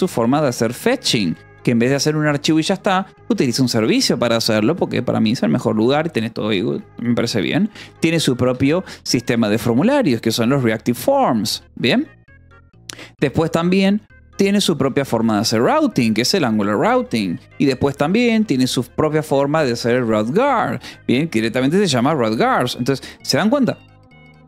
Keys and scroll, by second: 0.0-3.5 typing, 7.8-9.4 typing, 9.9 Escape, 10.4 shift+;, 11.4 Return, 12.6 o, 13.1 shift+;, 13.2 space, 14.6-18.6 typing, 15.6 Escape, 19.7 u, 20.1 d, 20.4 Escape, 20.9 a, 21.3 Escape, 22.3 s, 22.5 Escape, 23.2 a, 23.5 s, 23.7 Escape.